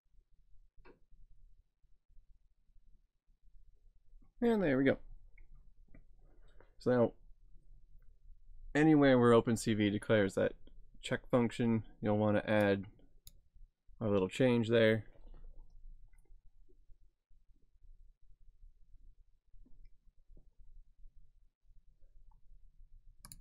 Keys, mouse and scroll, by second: 12.7 click, 23.3 click.